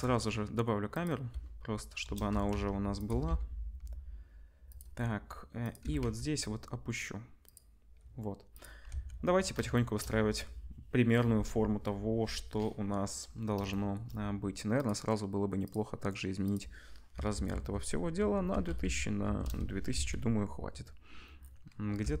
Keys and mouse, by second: 2.0 KP_0, 2.3 g, 3.0-5.0 middle drag, 3.0 g, 5.6 click, 5.8 g, 8.5 click, 8.9 ctrl+s, 16.5-22.2 drag, 17.4 0, 18.8 0, 19.9 ctrl+s, 22.0 g.